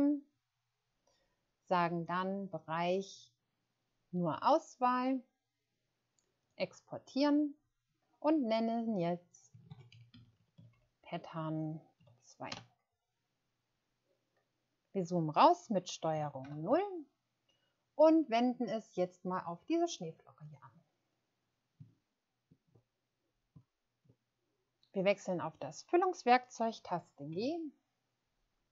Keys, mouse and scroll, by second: 9.8-10.7 typing, 12.4 Return, 16.4 ctrl+0, 21.9 ctrl+scroll up 1, 23.8 ctrl+scroll up 1, 27.3 g.